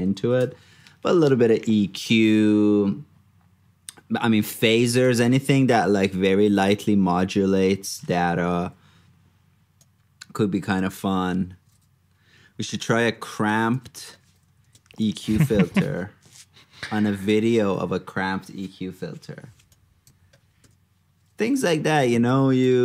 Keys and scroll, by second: 0.6 super+Tab, 5.1 super+c, 5.3 super+Tab, 8.1 super+d, 8.5 super+v, 10.9 super+d, 13.7 super+c, 14.2 super+v, 22.2 super+c.